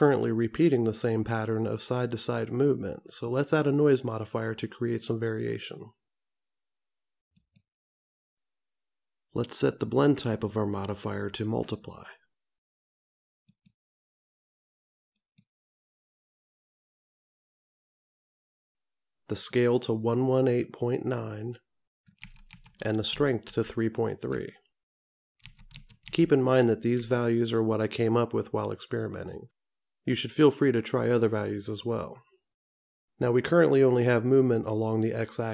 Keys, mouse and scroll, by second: 5.2 click, 10.0 click, 13.7 click, 19.6 click, 22.7 KP_1.